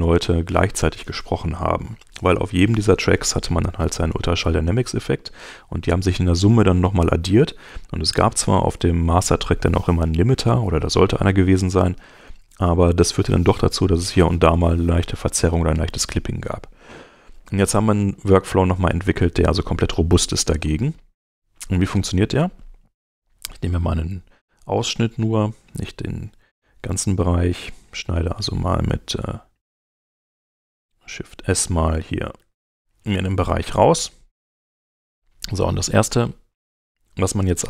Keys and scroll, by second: 32.4 shift+s.